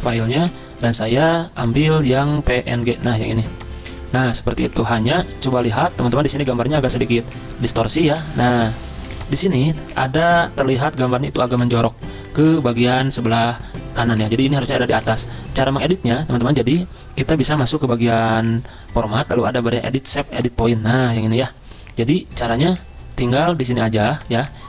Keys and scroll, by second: 11.6 ctrl+z, 13.3 ctrl+z, 15.0 ctrl+z.